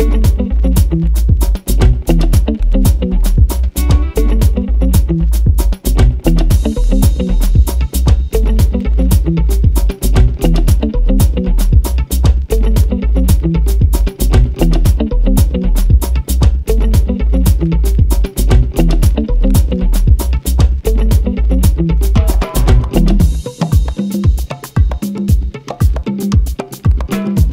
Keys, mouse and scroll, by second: 0.2 g, 0.6 click, 1.0 r, 1.4 click, 2.9 KP_1, 3.4 Tab, 3.9 `, 4.3-6.4 drag, 6.5 click, 7.0 KP_1, 7.8 o, 10.8 right click, 11.3-17.6 drag, 12.4 g, 17.6 right click, 18.0 g, 21.5 click, 22.0 g, 25.2 click, 25.6 r, 27.2 click, 27.4 o.